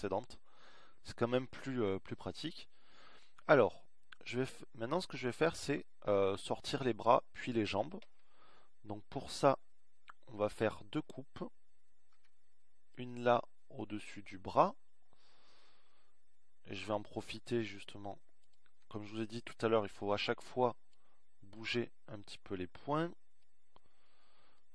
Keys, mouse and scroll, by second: 15.7 ctrl+r, 22.5 a, 23.7 b.